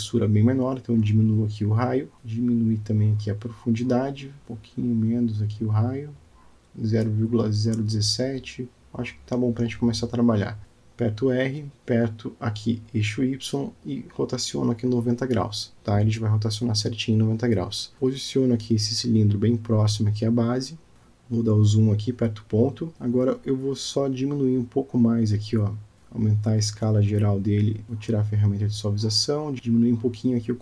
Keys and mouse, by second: 3.2-4.5 drag, 5.1-8.5 drag, 8.9-9.5 alt+middle drag, 10.0 shift+click, 10.2-10.7 shift+middle drag, 11.6 r, 13.4 g, 21.0-22.0 drag, 22.9 KP_Decimal, 23.8 Tab, 24.4 click, 25.8 click, 27.4 s, 29.3 o, 29.9 s.